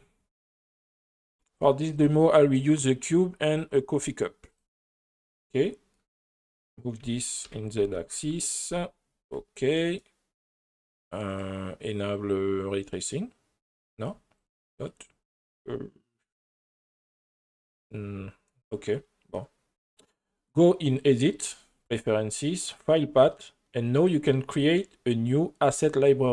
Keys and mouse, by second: 0.8 click, 4.5 click, 6.2 right click, 7.0 g, 7.4 z, 7.8 KP_1, 8.2 KP_Enter, 12.9 click, 14.0 click, 14.4 click, 14.8 click, 15.2 click, 21.0-22.0 drag.